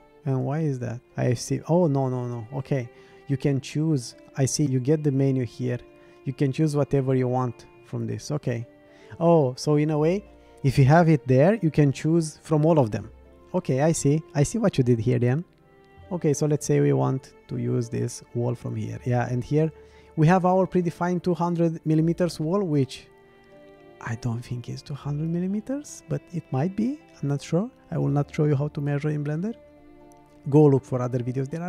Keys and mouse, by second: 1.5-3.9 drag, 4.6-16.6 drag, 19.6-24.4 drag.